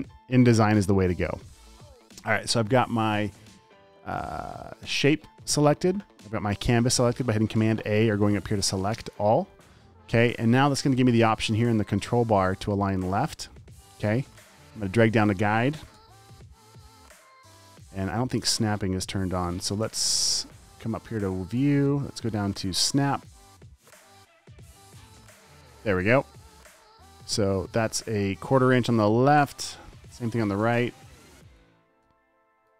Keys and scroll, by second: 19.6 super+z, 27.8 super+d, 30.8 super+a, 32.4 super+d.